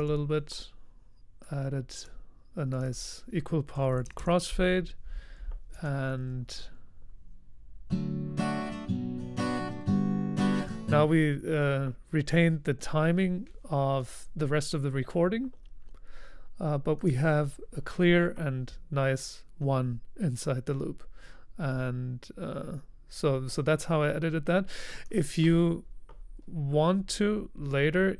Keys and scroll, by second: 0.0-0.4 typing, 2.8-4.7 typing.